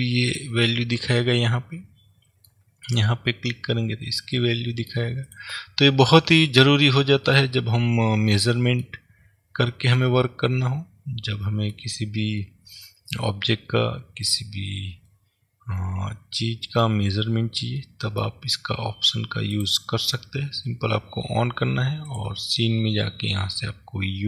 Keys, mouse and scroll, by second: 0.4 click, 1.3-3.0 middle drag, 3.0 click, 3.6-5.4 middle drag, 5.4 click, 7.4-19.6 middle drag, 14.6-15.1 scroll down 2, 17.2-18.0 scroll up 1, 19.6-22.2 drag.